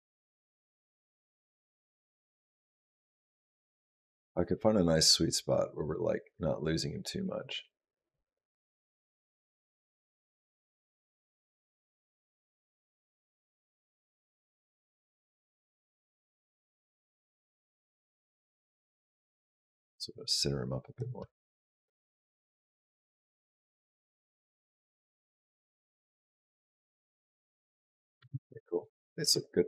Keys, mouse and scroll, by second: 15.6 space, 17.2 click, 19.4 click, 21.0 space, 28.0 space, 29.0 space.